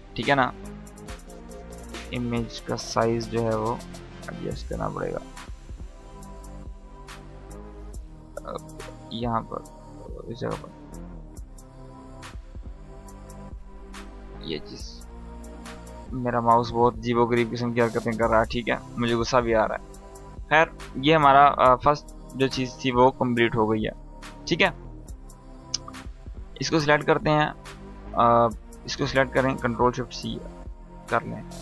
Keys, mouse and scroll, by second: 1.8-2.3 typing, 3.4-5.8 drag, 16.6 click, 16.6 space, 18.4-19.0 drag, 25.0 click, 25.8 shift+click, 30.5 ctrl+shift+c.